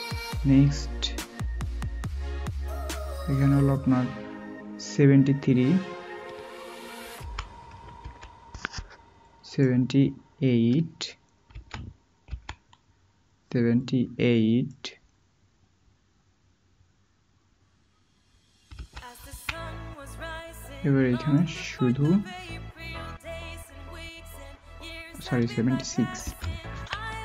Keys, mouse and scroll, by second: 7.1-8.0 typing, 11.5-12.2 typing, 18.7-19.2 typing, 26.2-26.7 typing.